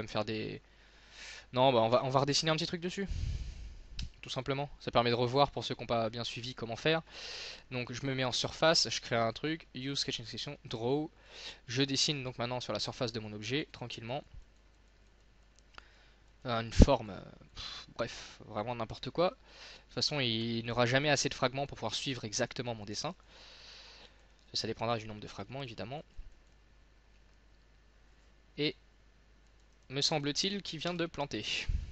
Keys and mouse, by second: 4.1 n, 5.5-6.6 drag, 20.9-22.7 middle drag, 22.7 click.